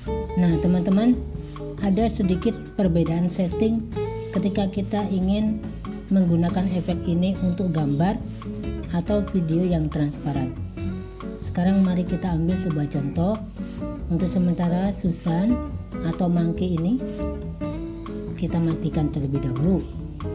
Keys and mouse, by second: 17.2 click.